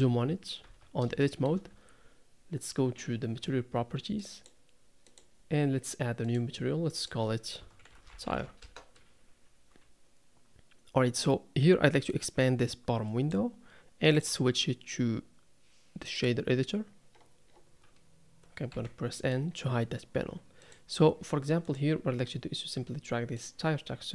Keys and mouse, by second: 0.7 Tab, 1.2 shift+middle click, 1.7 Tab, 4.3 click, 5.0 click, 6.3 click, 7.0-8.6 drag, 12.1-13.3 drag, 18.7 n, 19.2 click.